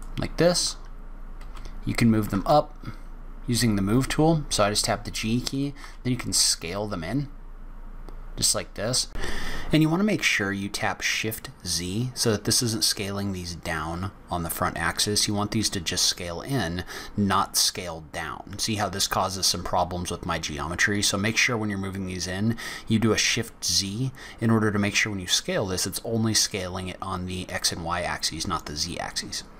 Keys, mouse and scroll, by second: 1.4 g, 15.1 Tab, 15.7 click, 17.4 click, 22.4 click, 23.4 KP_0, 25.3 g.